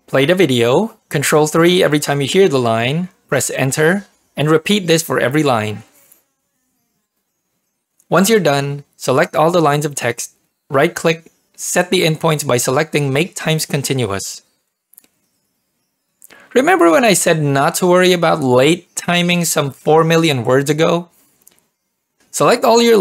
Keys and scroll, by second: 0.1 ctrl+3, 0.4 ctrl+p, 4.1 Return, 6.0 ctrl+3, 6.0 ctrl+p, 6.0 Return, 6.2 ctrl+3, 6.6 ctrl+3, 6.6 Return, 7.0 ctrl+3, 7.2 Return, 7.8 ctrl+p.